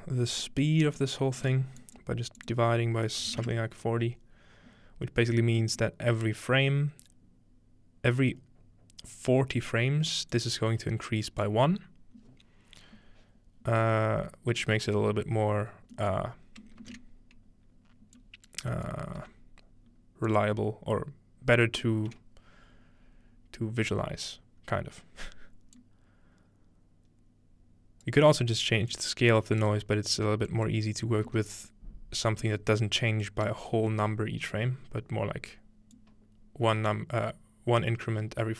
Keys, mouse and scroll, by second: 0.4 click, 1.0-4.1 drag, 1.5 typing, 5.2-5.8 scroll down 1, 10.3-11.8 drag, 11.3 right click, 15.9-18.7 middle drag, 17.7-19.2 scroll up 1, 18.2-18.7 drag, 19.2 g, 20.3 drag, 21.0-21.7 scroll down 1, 21.7-22.7 scroll down 1, 22.7-23.3 middle drag, 24.6-25.8 scroll up 2, 25.8-28.1 drag, 28.9 click, 30.5 click, 33.2-34.1 drag, 36.0-38.5 drag.